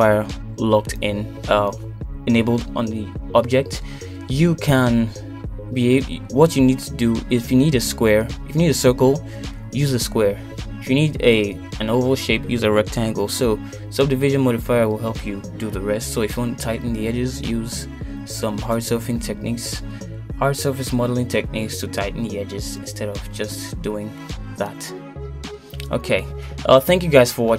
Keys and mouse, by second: 0.3 s, 2.2 Tab, 3.1 shift+middle click, 3.9 shift+middle click, 6.1 middle click, 7.5 middle click, 8.9 click, 9.2 middle click, 10.6 middle click, 12.0 middle click.